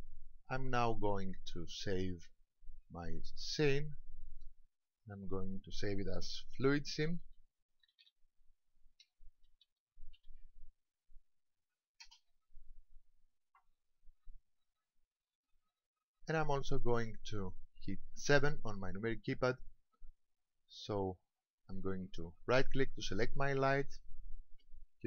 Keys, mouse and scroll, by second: 1.2 click, 14.7 click, 15.6-18.1 scroll down 6, 18.2 KP_7, 23.8 right click.